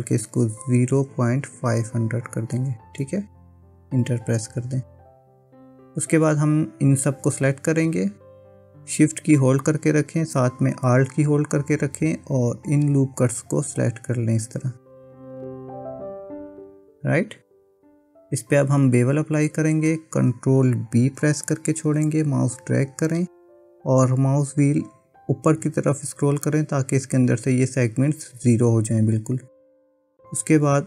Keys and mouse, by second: 2.6 KP_0, 5.2 click, 12.5 alt+shift+click, 13.6 alt+shift+click, 14.6 alt+shift+click, 15.6 alt+shift+click, 21.4 ctrl+b.